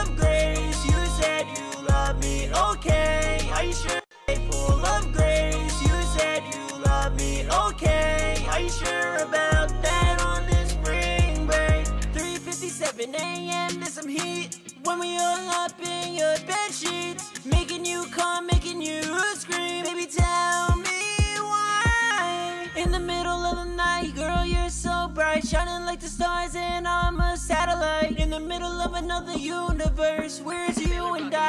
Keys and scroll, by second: 1.9-5.3 typing, 9.5-10.2 typing, 13.0 typing, 14.5 typing, 17.3 super+s, 17.6 super+Tab, 30.1 super+Tab.